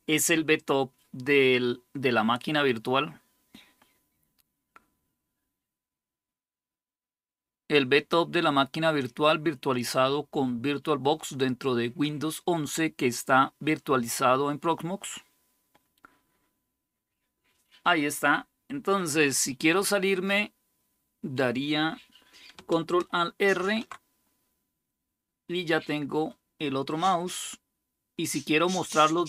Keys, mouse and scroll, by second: 23.3 ctrl+alt+r.